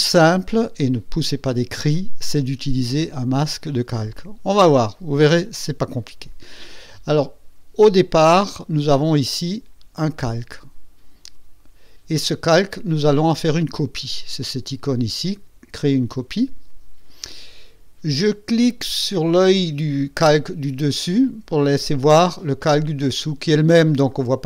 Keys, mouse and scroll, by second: 15.7 click, 23.1 click, 24.0 click.